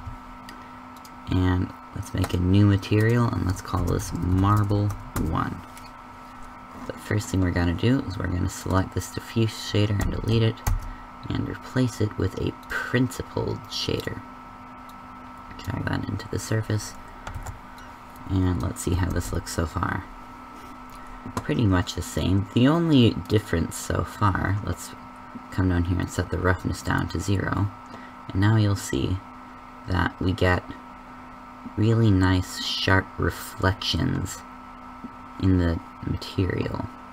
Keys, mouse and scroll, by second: 0.9-2.1 drag, 9.9 x, 10.6 shift+a, 17.2 ctrl+b, 19.0 shift+z.